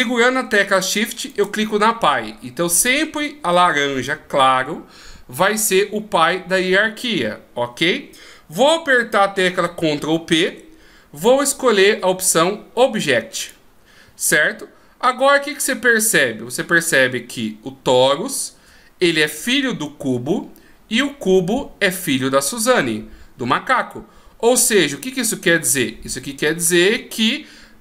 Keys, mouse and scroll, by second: 1.2 shift+right click, 10.4 ctrl+p.